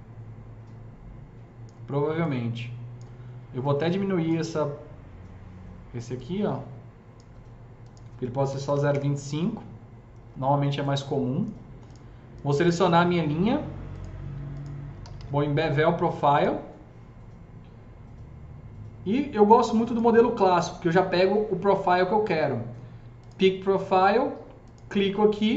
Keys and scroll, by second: 8.4 KP_Decimal, 8.6 KP_2, 8.6 KP_5, 8.8 Return, 14.7-15.6 typing.